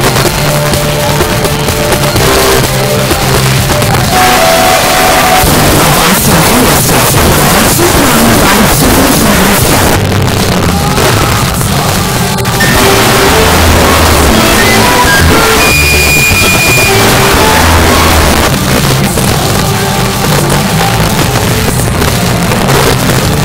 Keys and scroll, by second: 9.9 Page_Down, 18.3 Page_Down.